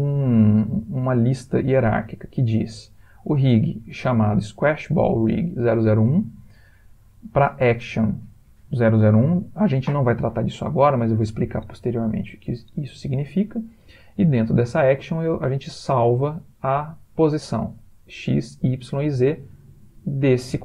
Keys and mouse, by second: 0.9 middle click, 3.3 click, 7.6 click, 15.1 click, 16.5 click.